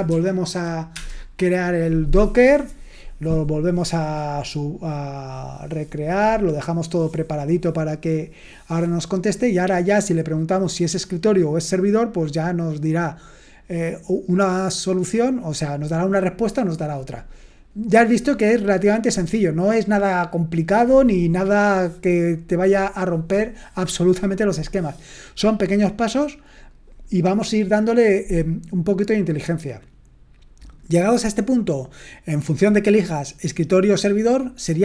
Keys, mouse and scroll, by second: 0.1 ctrl+p, 0.9 Return.